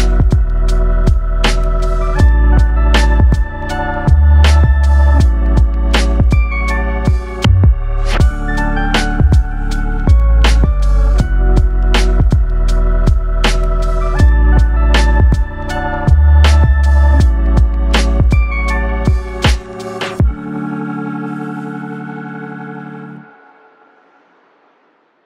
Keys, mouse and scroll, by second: 0.2 click, 2.4 click, 3.4 click, 4.4 click, 5.4-5.9 scroll down 3, 5.9 middle click, 7.5 click, 9.8-10.1 scroll down 3, 10.2 middle click, 10.7-11.8 scroll up 4, 11.8 click, 13.2 click, 16.1 click, 17.4 click, 19.3-20.4 scroll down 3, 19.8 middle click, 21.2 click, 23.3-24.2 scroll down 2, 24.2-24.8 scroll up 4, 24.8-25.2 scroll down 2.